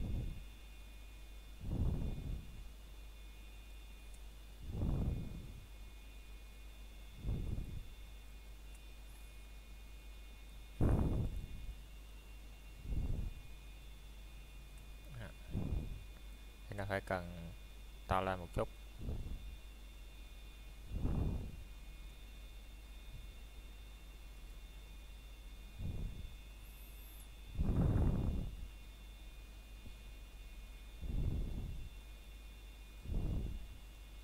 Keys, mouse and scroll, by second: 1.0 click, 2.5 middle click, 3.0 scroll up 1, 3.3 shift+middle click, 4.1 scroll down 1, 4.6 middle click, 5.0-5.4 scroll up 1, 5.4 middle click, 6.2 scroll up 1, 6.5 middle click, 7.4 scroll down 1, 8.0 middle click, 11.4 click, 13.7 middle click, 15.2 click, 15.8 middle click, 18.5 scroll down 1, 18.8 middle click, 19.2-19.7 scroll up 1, 19.7 middle click, 20.3-20.9 scroll down 1, 20.9 middle click, 22.5 scroll up 1, 23.1 middle click, 25.1 scroll down 1, 25.5 middle click, 26.7 click, 27.4 middle click, 28.5 Tab, 30.7 click, 31.0 middle click, 32.5 scroll down 1, 32.9 middle click, 33.3-33.7 scroll up 1, 33.9 shift+middle click.